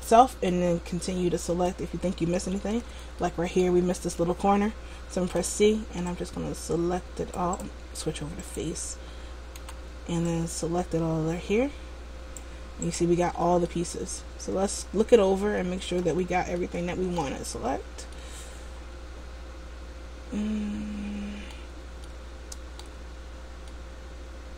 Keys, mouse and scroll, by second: 0.2 middle click, 0.9-3.3 scroll up 3, 3.3 shift+middle click, 3.9-4.6 scroll up 1, 5.3 c, 7.7 right click, 8.6 click, 9.7 c, 13.4-13.9 scroll down 2, 13.8 middle click, 16.7 shift+middle click, 17.8-18.2 scroll down 1, 18.2 middle click, 22.2 shift+middle click, 23.4-23.7 scroll up 1, 23.8 middle click.